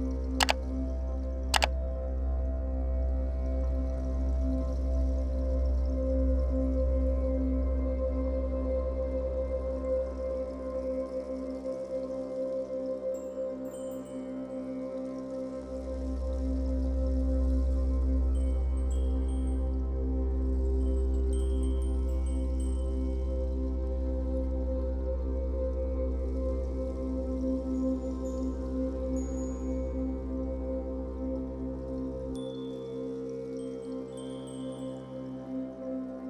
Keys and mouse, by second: 0.9 click, 2.6 click, 7.7 click, 22.2 click, 23.5 ctrl+l, 24.9 click, 31.8 click, 35.5 click.